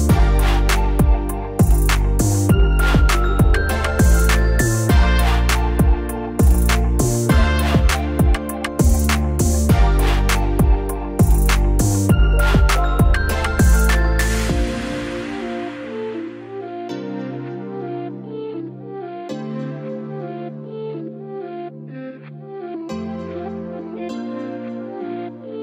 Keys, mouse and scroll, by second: 1.0 click, 1.8-2.5 typing, 3.3 middle click, 4.8 click, 5.9 scroll up 1, 7.5-11.5 drag, 11.5 middle click, 13.3-19.5 drag, 19.8-25.6 drag.